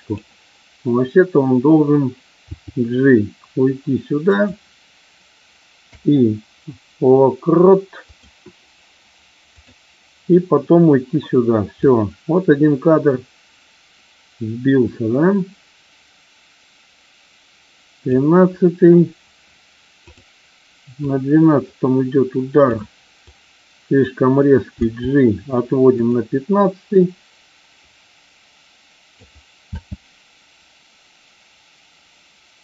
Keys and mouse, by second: 2.4 g, 4.3 click, 5.8 i, 9.4 click, 11.8-18.1 drag, 19.9 click, 21.1-22.8 drag, 23.2 click, 24.7 g, 25.8 click, 26.9-29.2 drag, 29.7 space.